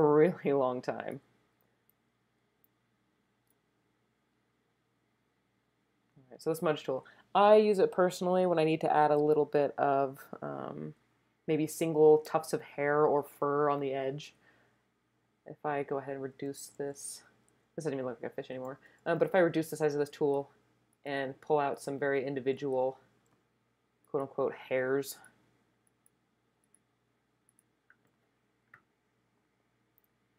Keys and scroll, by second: 16.3-17.5 typing, 19.1 [, 19.3 [.